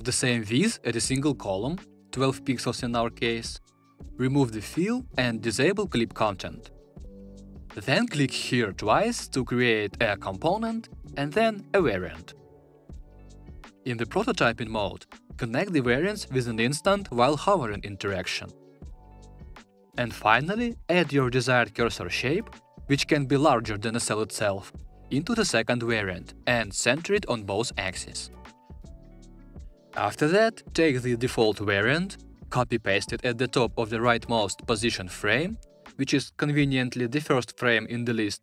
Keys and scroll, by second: 32.4 super+c, 37.4 super+v.